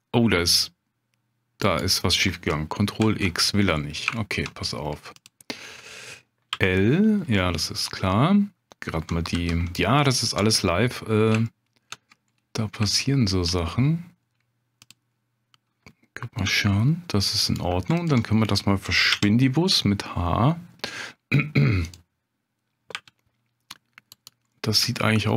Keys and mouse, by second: 3.0 ctrl+x, 4.1 shift+middle click, 4.7 middle click, 5.2 click, 6.5 l, 7.4 middle click, 9.3 3, 10.2 alt+click, 10.6 middle click, 11.5 shift+click, 12.9 shift+click, 14.9-16.4 drag, 16.4 g, 18.0 alt+click, 19.1 h, 19.7 middle click, 21.8 click, 22.9 g, 24.5 middle click, 24.9 shift+middle click.